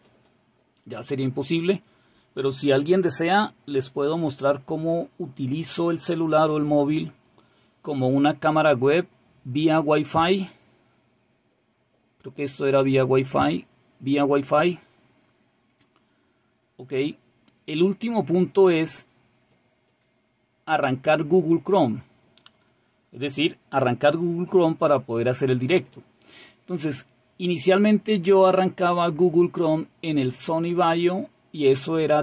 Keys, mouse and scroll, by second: 12.4-14.5 scroll up 2, 14.5-20.7 scroll down 3.